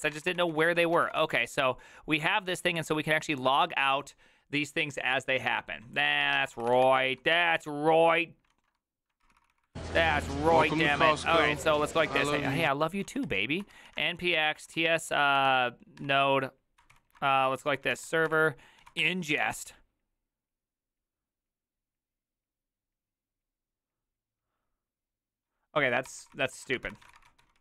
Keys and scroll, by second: 0.0-2.2 typing, 6.1-7.3 typing, 8.5 ctrl+a, 9.2 ctrl+c, 9.4 ctrl+c, 9.6 ctrl+c, 10.6 Up, 11.5 Up, 12.3 Return, 13.0-19.4 typing, 16.0 Tab, 26.1 ctrl+c, 26.2 ctrl+c, 26.3 ctrl+c, 26.5-27.6 typing.